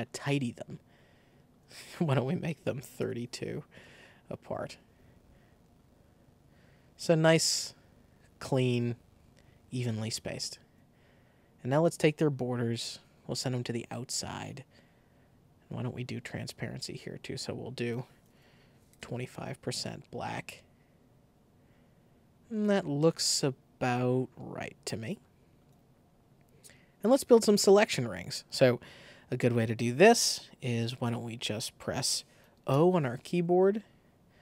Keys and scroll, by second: 2.8 3, 2.9 Return, 17.9 super+a, 18.6 super+2, 18.8 5, 19.0 Return, 32.6 o.